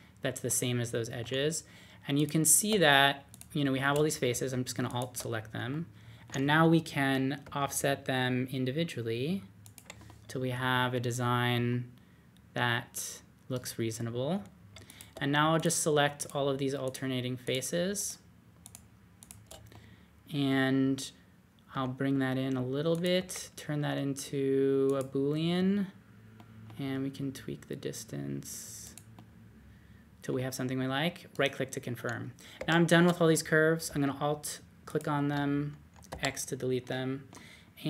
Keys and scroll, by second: 7.4 o, 21.7 d, 23.1 w, 26.5-27.3 typing, 32.6 typing, 36.1 x.